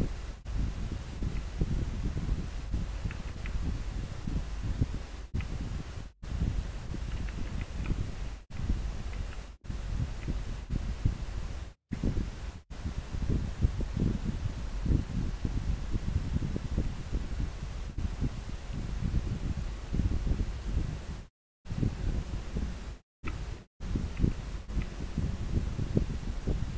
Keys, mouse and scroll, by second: 1.4 scroll down 1, 7.6 scroll down 1, 8.6 scroll up 1, 10.2 scroll down 1, 20.2-21.3 scroll down 1, 25.0 scroll up 1.